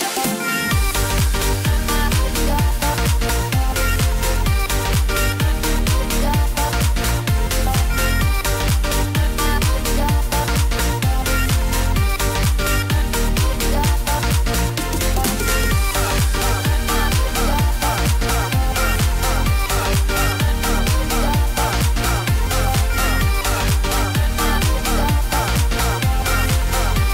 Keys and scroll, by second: 11.1 ctrl+d, 14.4 ctrl+t.